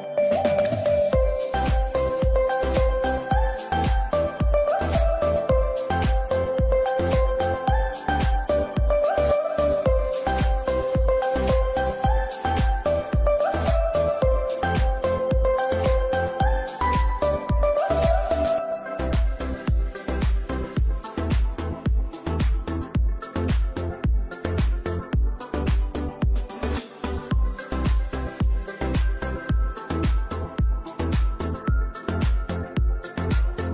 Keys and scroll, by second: 18.0 F2.